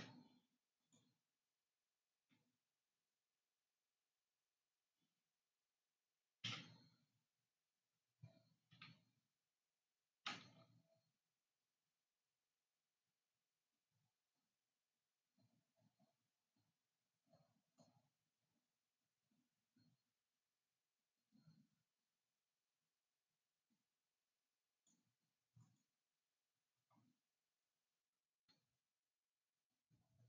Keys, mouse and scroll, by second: 1.0 click, 7.0 Tab, 10.6 ctrl+r, 28.4 ctrl+r.